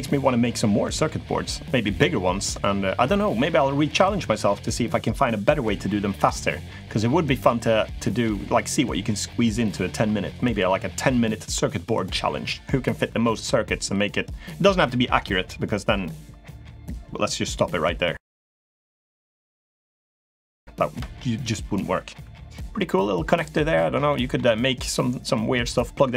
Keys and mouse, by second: 23.9 middle click.